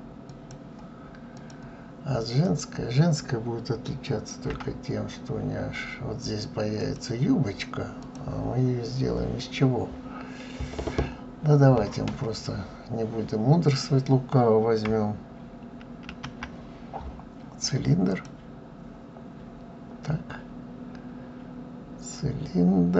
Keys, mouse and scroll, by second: 1.1 click, 2.2 click, 4.2 Delete, 5.6-6.5 scroll up 1, 6.5 click, 7.8 click.